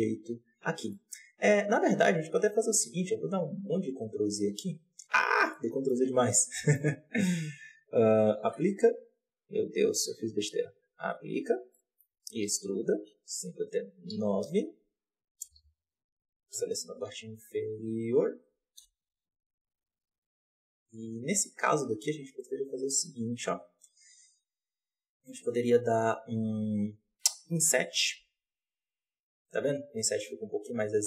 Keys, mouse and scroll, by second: 0.6 scroll down 1, 0.8 middle click, 1.5 ctrl+z, 1.7-2.2 ctrl+z, 2.3 ctrl+z, 2.5-3.0 ctrl+z, 3.1 ctrl+z, 3.3-4.4 ctrl+z, 5.4 middle click, 6.0 z, 6.4 middle click, 6.9 a, 8.3 ctrl+a, 9.1 click, 9.6 Tab, 10.2 Tab, 10.8 ctrl+a, 11.3 Tab, 11.6-12.2 middle drag, 12.2 e, 15.3 KP_7, 15.4 z, 16.4 KP_1, 16.7 alt+a, 17.0 b, 17.8 click, 18.7 KP_7, 19.0-19.5 scroll up 1, 19.5 s, 26.6 KP_1, 27.4 KP_7.